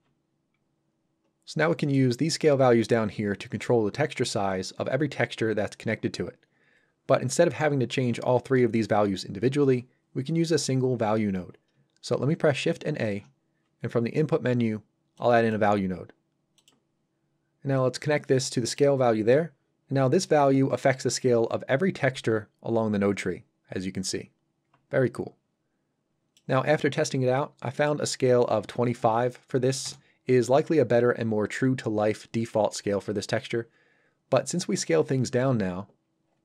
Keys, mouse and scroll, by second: 1.4 scroll up 1, 1.7 middle click, 12.9 shift+a, 15.1 click, 17.7 click, 21.9 click, 27.7 click, 28.5 KP_2, 29.8 Return, 35.9-36.4 scroll up 1.